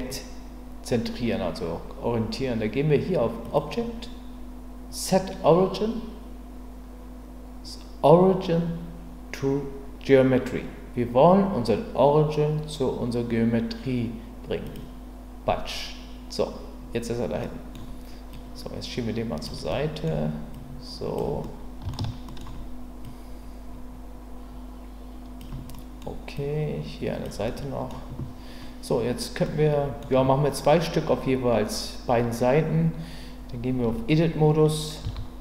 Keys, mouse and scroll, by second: 3.4-14.7 drag, 17.4 middle drag, 18.3-19.4 drag, 19.7 scroll up 2, 19.8-20.1 middle drag, 20.5-21.2 drag, 21.4-21.8 scroll up 1, 21.8 shift+middle click, 22.3 shift+scroll up 1, 23.0-25.4 drag, 25.7-26.1 scroll up 1, 26.3-27.2 drag, 27.4-27.9 middle drag, 29.4-30.0 scroll up 1, 33.9 Tab, 35.0 a.